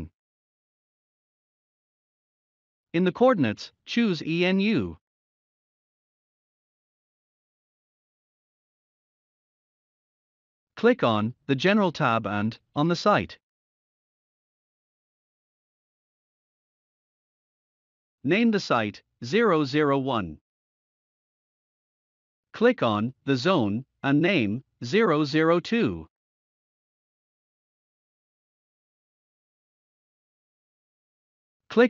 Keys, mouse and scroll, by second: 14.5 click, 14.5-19.3 drag, 19.3-20.4 typing, 21.4 click, 26.1 click, 26.1 click, 28.7-29.5 typing, 30.8 click.